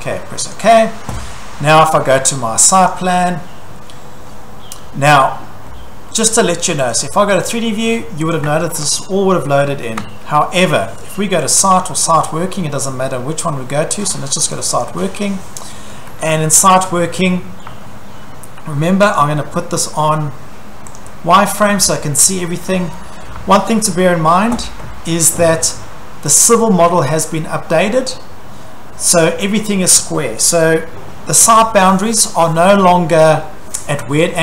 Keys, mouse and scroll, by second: 0.6 click, 2.7 click, 2.9 click, 4.2-5.1 scroll, 6.9 click, 8.4 click, 10.0 shift+middle click, 11.5 click, 11.7 click, 13.1 scroll, 14.6 click, 14.8 click, 15.9-16.6 scroll, 16.6 Escape, 17.0 Escape, 17.6 scroll, 17.7 Escape, 19.2 click, 20.9 click, 21.6 Escape, 21.8 middle click, 22.7 Escape, 22.9 middle click, 23.0 middle click, 23.4 Escape, 24.3 scroll, 25.3-25.7 scroll, 26.4 click, 27.8-28.2 scroll, 33.4 scroll.